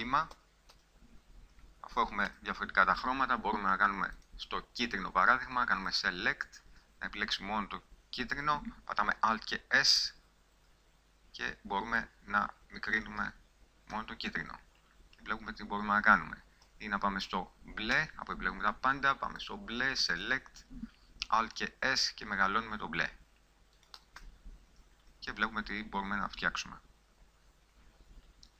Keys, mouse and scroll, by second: 0.8 a, 1.2 a, 2.7 a, 6.3 click, 8.0-10.0 middle drag, 9.6 alt+s, 13.5 click, 14.4 Tab, 17.2 Tab, 18.4 a, 21.8 alt+s, 24.7 Tab.